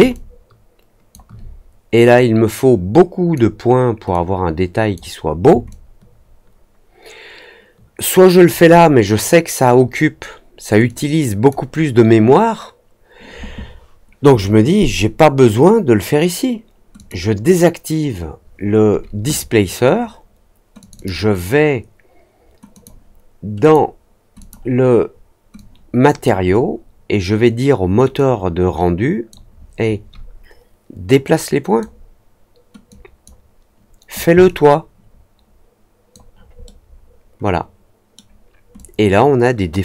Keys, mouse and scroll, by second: 0.1-1.1 alt+drag, 2.1-3.3 drag, 4.0 click, 5.6-8.4 alt+drag, 10.8-11.4 drag, 16.9 click, 20.7 click, 20.9 click, 22.7 click, 23.5 click, 24.3 click, 25.5 click, 28.1-29.2 drag, 31.2 click, 32.8 click, 34.4-36.1 alt+drag, 36.6-38.1 alt+middle drag, 38.7-39.8 alt+drag.